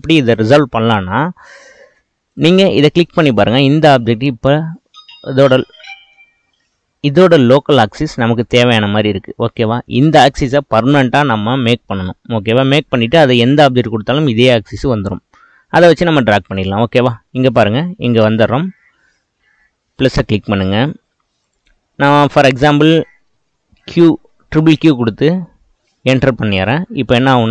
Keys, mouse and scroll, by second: 1.4-2.3 middle drag, 2.3 click, 3.1-7.3 middle drag, 7.7-12.7 middle drag, 17.4-20.5 drag, 23.4 q.